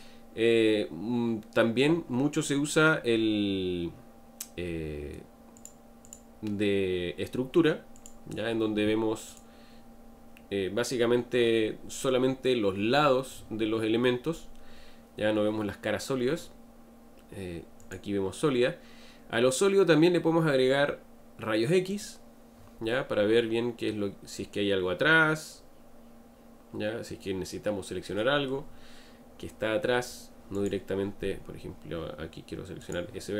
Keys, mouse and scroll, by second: 5.6 click, 6.1 click, 7.9 click, 9.3 click, 17.8 click, 21.9 click, 22.9-25.9 middle drag, 30.5 click, 32.8 click.